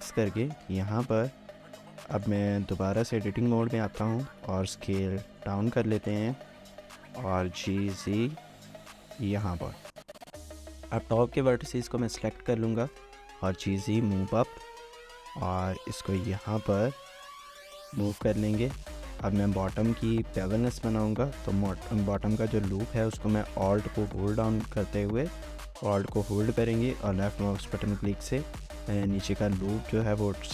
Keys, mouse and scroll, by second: 0.4 shift+click, 3.5 Tab, 4.0-4.4 typing, 6.3 shift+middle click, 6.6 typing, 9.5 typing, 9.7 shift+middle click, 10.5 shift+middle click, 10.7 shift+middle click, 10.8 shift+scroll up 1, 11.1 shift+scroll down 1, 11.3 shift+middle click, 11.9-12.9 typing, 14.4 shift+middle click, 14.8 scroll up 1, 15.2 typing, 17.5 scroll down 1, 17.7 shift+middle click, 18.3 shift+middle click, 18.9 shift+middle click, 19.1 scroll up 1, 19.5 shift+middle click, 20.0 alt+click, 20.2 scroll up 1, 20.5 shift+middle click, 22.8 shift+middle click, 24.0 alt+click, 26.3 alt+click.